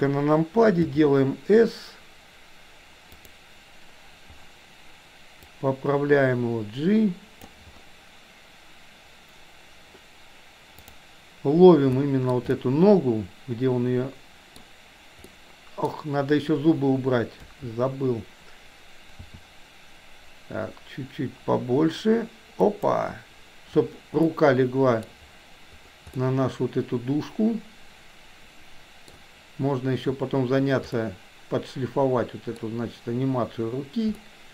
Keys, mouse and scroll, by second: 0.8 s, 5.4-7.4 drag, 11.9-14.8 shift+middle drag, 15.3-17.6 middle drag, 17.6 KP_3, 19.1 s, 24.4 middle click, 26.3-29.2 middle drag, 30.9-31.9 scroll up 1, 31.9 middle click, 34.3 middle click.